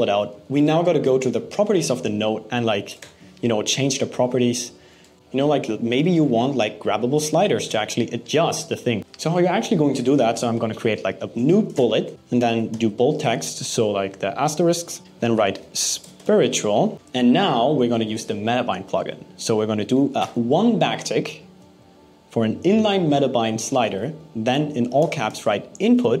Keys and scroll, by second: 2.5 BackSpace, 4.7 BackSpace, 12.3 super+b, 15.6 BackSpace, 16.9 Right, 24.4-25.5 typing.